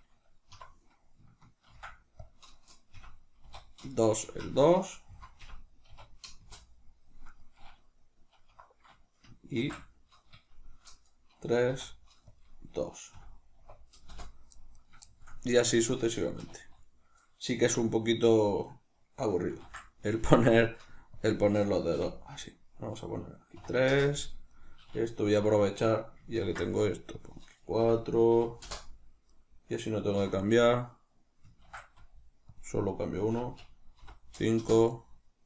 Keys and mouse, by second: 0.4 F2, 4.4 Right, 6.4 Return, 7.2 right click, 8.4 F2, 14.7 right click, 14.9-24.4 shift+middle drag, 16.3 2, 24.4 right click, 25.2 F2, 29.2 right click, 30.1 F2, 34.8 right click.